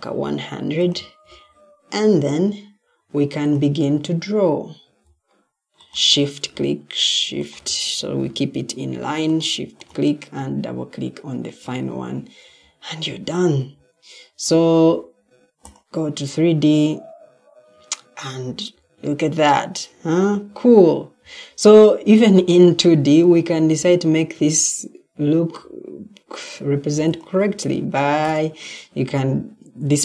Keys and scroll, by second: 23.1 Escape.